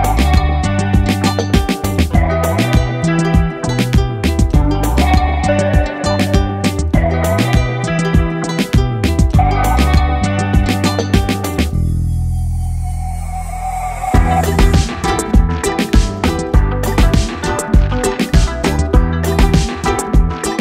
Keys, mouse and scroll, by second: 1.1 g, 6.8 click, 10.7 click, 14.5 click, 15.7 g.